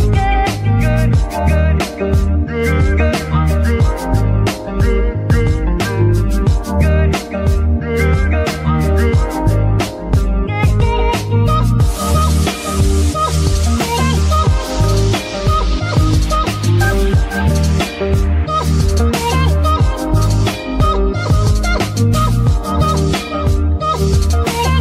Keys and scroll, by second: 2.3 BackSpace, 17.3 KP_3, 23.5 z.